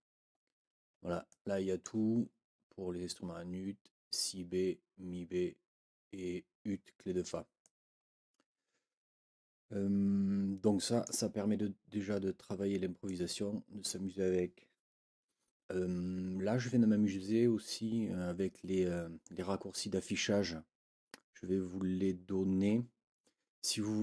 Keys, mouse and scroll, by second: 0.4 ctrl+scroll up 2, 1.3 ctrl+click, 7.6-11.2 drag, 11.9 ctrl+scroll down 2, 13.0-14.0 drag.